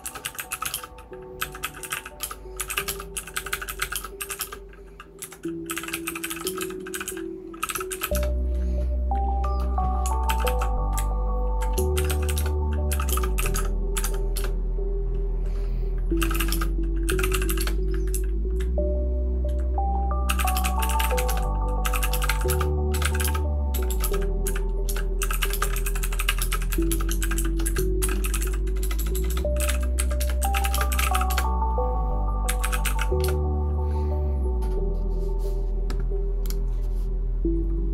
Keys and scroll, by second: 0.0-8.7 typing, 10.0-11.4 typing, 11.4 Down, 11.5 Down.